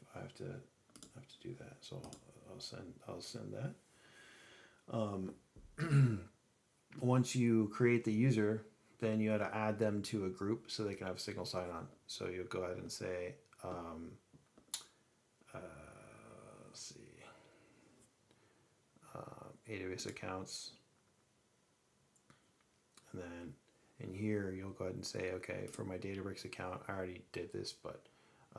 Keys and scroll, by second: 21.3 alt+a.